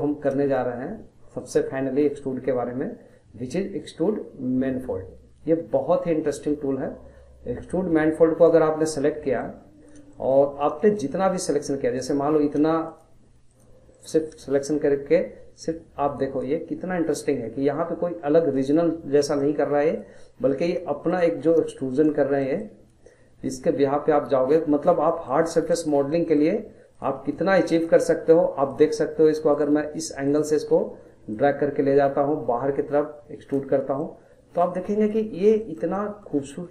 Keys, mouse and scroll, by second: 0.0-1.4 shift+middle drag, 1.4-4.5 drag, 9.0 scroll down 2, 9.2 middle click, 9.6-10.1 scroll up 2, 10.1 shift+middle click, 10.5 scroll up 1, 10.8-12.0 shift+middle drag, 12.0 click, 12.9 shift+click, 13.4 shift+click, 13.9-15.5 middle drag, 15.5 click, 19.4-20.4 middle drag, 20.4 click, 21.1 shift+click, 21.9 shift+click, 22.4-23.5 middle drag, 23.5 click, 25.1 middle click, 25.5 scroll, 25.7-26.9 shift+middle drag, 26.9 click, 27.7 shift+click, 28.7 shift+click, 29.5 shift+click, 30.2 shift+click, 31.3 click, 33.7 scroll, 34.0-35.3 middle drag, 35.3 scroll, 35.6-36.7 shift+middle drag.